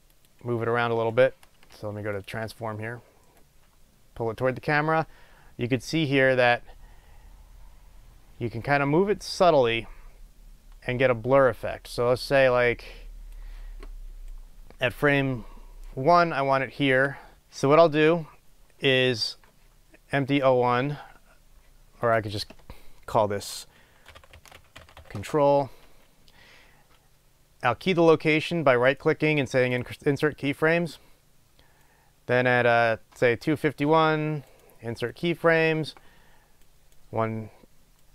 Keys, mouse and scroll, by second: 0.5 click, 3.6-14.5 drag, 14.5-22.4 right drag, 18.9-19.8 scroll up 2, 19.8-21.3 scroll up 1, 21.3-22.4 scroll up 1, 22.4-30.0 drag, 25.5 Return, 30.0-34.0 right drag, 35.4-37.3 right drag.